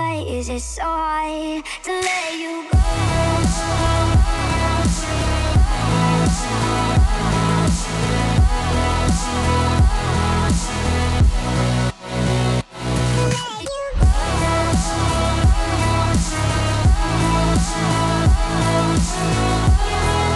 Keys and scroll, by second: 14.3 F9.